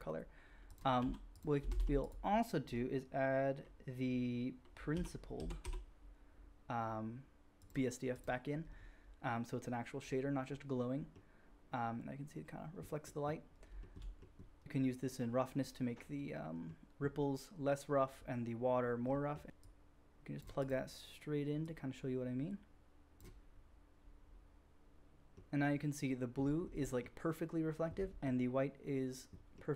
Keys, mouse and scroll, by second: 0.6 middle click, 0.7 click, 0.9 g, 1.7 shift+a, 10.9-13.6 drag, 13.6 shift+middle drag, 13.9-19.6 drag, 19.6-26.3 middle drag, 26.3-26.8 scroll up 1, 26.8-27.2 middle drag, 27.4-28.2 scroll up 2, 27.5 middle drag, 28.2-29.7 middle drag.